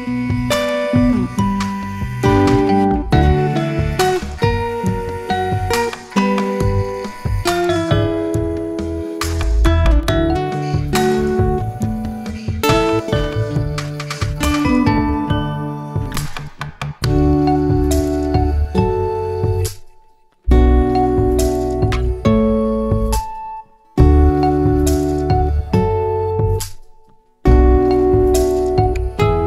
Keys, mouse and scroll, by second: 0.2-1.7 middle drag, 1.7 ctrl+z, 2.0 ctrl+z, 2.2 ctrl+z, 2.6 scroll down 1, 2.8 middle click, 3.3-3.6 scroll down 1, 3.6-5.1 middle drag, 5.8 click, 7.0 g, 8.5 click, 10.0 scroll down 1, 10.2-11.7 scroll up 1, 13.2 n, 13.7 scroll down 1, 13.9 click, 15.0-16.3 scroll down 1, 16.3 click, 16.8 g, 18.1 click, 18.4-19.0 scroll up 3, 19.0-20.6 drag, 20.7 s, 21.7 s, 23.6-24.2 scroll down 1, 24.2 g, 25.9 shift+middle click, 26.3 Tab, 27.0 ctrl+r, 28.3 Tab, 28.9 click.